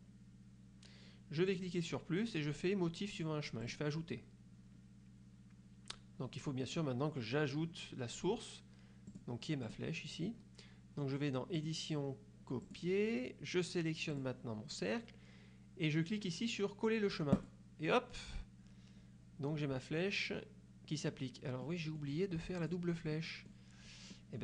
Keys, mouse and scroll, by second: 1.6 click, 3.7 click, 9.1 click, 9.7 click, 11.7 click, 12.7 click, 14.3 click, 17.5 click, 21.7 middle click, 22.7 click, 23.3 middle click, 24.3 middle click.